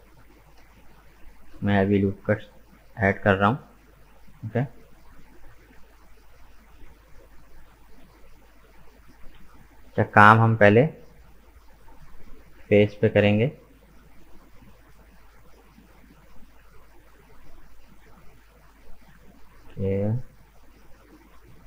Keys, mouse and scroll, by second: 1.0 ctrl+r, 2.5-6.4 middle drag, 6.4 ctrl+r, 9.0 right click, 9.4-12.4 middle drag, 14.1-14.5 scroll up 2, 14.5-17.5 middle drag, 19.4-21.6 middle drag.